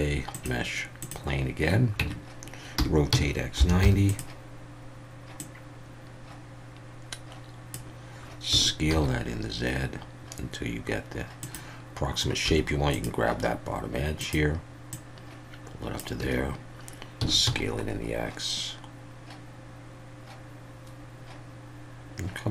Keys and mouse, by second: 2.0 Tab, 2.8 r, 3.1 x, 3.6 9, 3.8 0, 4.1 click, 5.5-7.7 drag, 8.5 s, 8.9 z, 11.4 click, 12.5 2, 12.9 click, 14.9-16.0 drag, 16.2 a, 17.2 s, 17.4 x.